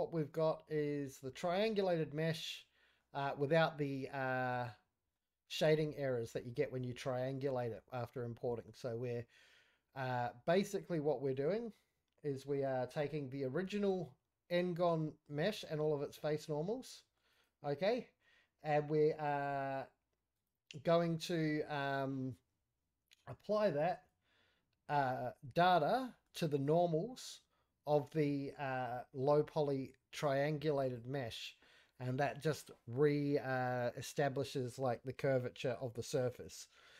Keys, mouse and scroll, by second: 0.8-1.6 middle drag, 1.7 z, 2.3-3.0 middle drag, 4.5 click, 5.2 middle drag, 5.5-5.8 scroll up 3, 5.8-6.4 middle drag, 5.8 scroll down 1, 6.4 scroll down 2, 6.6-7.2 middle drag, 7.4 middle drag, 8.1-8.7 ctrl+middle drag, 11.3 click, 12.5 click, 13.0 click, 13.5 scroll down 1, 13.6 middle click, 14.3 z, 15.4 z, 16.7-17.2 middle drag, 17.3 click, 17.9 z, 19.3 click, 20.3 click, 21.0-21.4 middle drag, 23.9 click, 24.9 middle drag, 25.4-26.1 scroll up 1, 26.1 middle click, 30.8 click, 31.8-32.5 middle drag, 36.1 click.